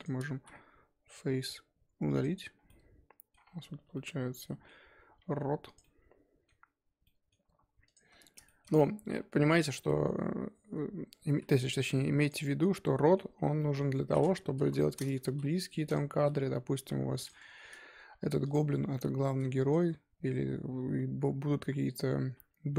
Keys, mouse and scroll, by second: 0.3 x, 2.6 middle click, 3.4 scroll down 1, 3.7 1, 3.9 middle click, 4.7-5.2 scroll up 3, 5.2 2, 5.6 click, 5.8-7.8 middle drag, 7.8 alt+click, 8.4 shift+middle click, 8.7 scroll down 1, 8.8 middle click, 9.3-10.0 scroll down 1, 11.3 e, 12.4-14.5 middle drag, 14.5 KP_1, 15.2 s, 17.8 scroll up 1, 18.1 2, 18.4 click, 18.9 middle click, 19.6 shift+click.